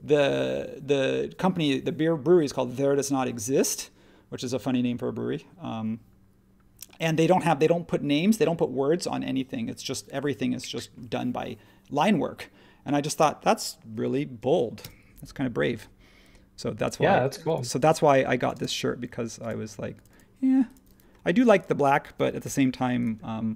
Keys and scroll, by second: 14.8 m, 18.5 space.